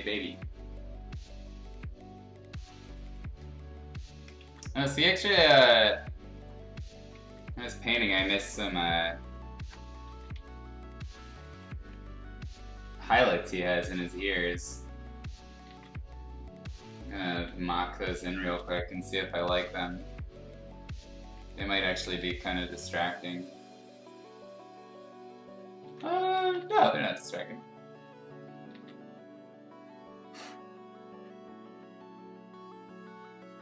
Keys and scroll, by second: 4.4 ctrl+z, 7.4 b, 8.4 ], 8.5 ], 10.1 ctrl+z, 10.3 x, 15.6 ctrl+z, 17.3 ctrl+z, 18.4 ctrl+z, 19.4 ], 25.8 ctrl+z, 26.3 [, 26.6 [, 26.7 [, 28.7 ctrl+z.